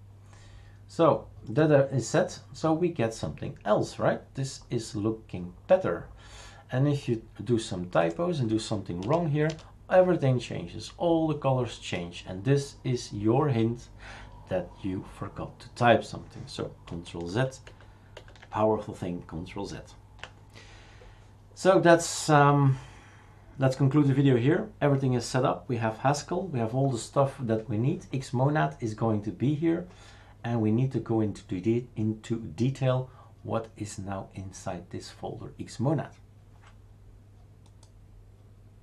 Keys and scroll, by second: 9.0 BackSpace, 9.4 BackSpace, 17.3 ctrl+z, 17.6 ctrl+z, 18.1 ctrl+z.